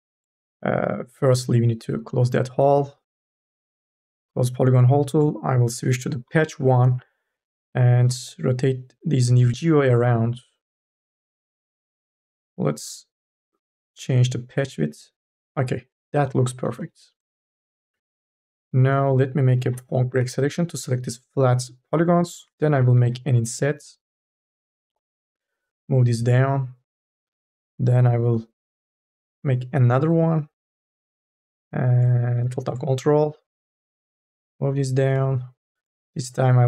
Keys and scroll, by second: 16.6 3, 19.4 u, 19.9 n, 22.8 m, 23.2 w, 28.9 m, 29.4 w, 36.4 t.